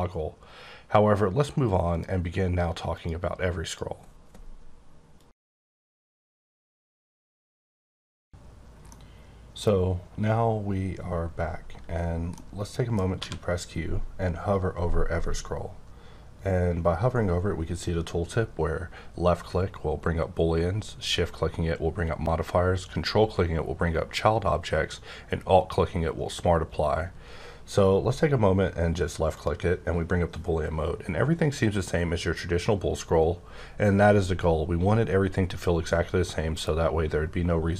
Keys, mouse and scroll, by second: 1.9 click, 2.9 click, 3.6 click, 9.8-10.3 scroll up 1, 10.3-12.1 scroll up 1, 12.3 middle click, 13.1 q, 29.3 click, 31.0-33.5 scroll up 14, 33.5-34.8 scroll down 6, 34.8-37.7 scroll up 16.